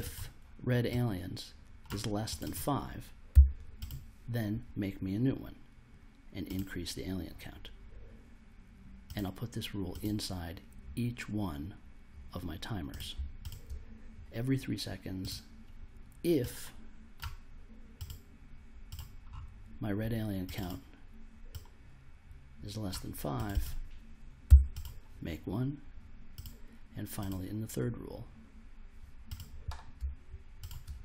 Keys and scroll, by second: 3.3 5, 24.4 5.